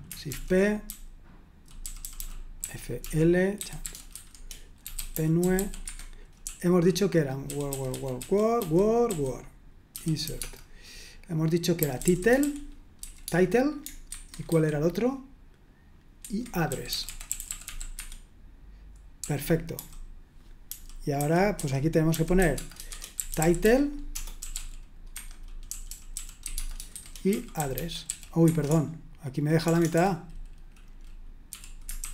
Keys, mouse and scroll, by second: 0.0-10.4 typing, 5.8 Escape, 11.5-13.3 typing, 14.1 super+1, 14.5 super+2, 16.3 super+1, 16.4-18.1 typing, 19.2-30.4 typing, 28.4 Escape, 31.5-32.1 typing.